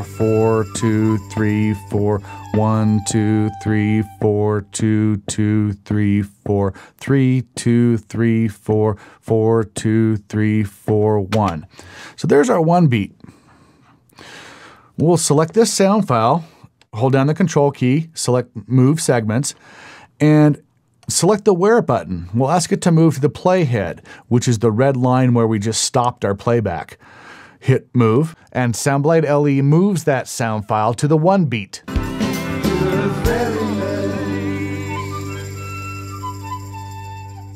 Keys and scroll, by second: 11.3 space, 31.6 space.